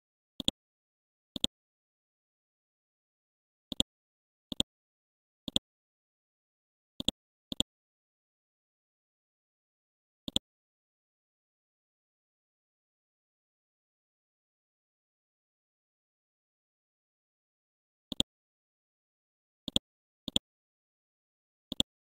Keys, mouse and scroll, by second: 0.4-1.4 drag, 1.4 right click, 3.7 click, 6.1 ctrl+z, 7.0 click, 7.6 right click, 8.3 scroll up 1, 10.2 right click, 10.8-11.1 scroll down 1, 11.2-12.1 scroll up 1, 12.1 F12, 12.9 Tab, 13.8 KP_2, 15.4 F12, 18.1 click, 21.7 right click.